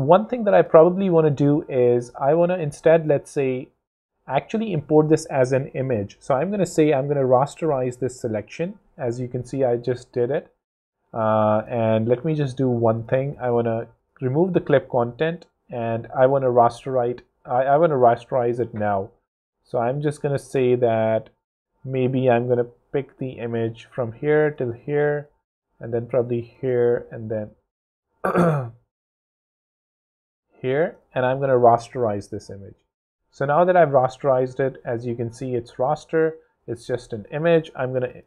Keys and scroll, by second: 5.6 alt+shift+super+p, 6.1 super+r, 6.3 a, 8.1 Return, 10.0 super+z, 20.4 super+z, 20.7 super+v, 31.9 super+p, 32.6 super+Return.